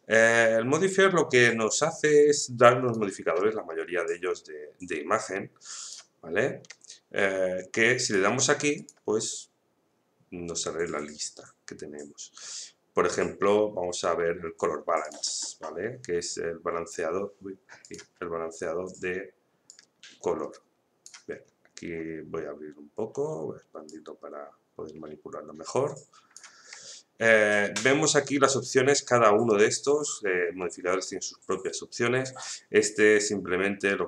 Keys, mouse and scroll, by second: 0.9-5.8 drag, 5.8 click, 15.0 click, 16.1-16.7 scroll down 1, 17.8-21.4 drag, 21.4 scroll down 1, 23.9-27.1 drag, 27.1-27.6 scroll down 1, 27.6-27.9 scroll up 1, 30.1-31.3 scroll down 1, 33.8-34.0 drag.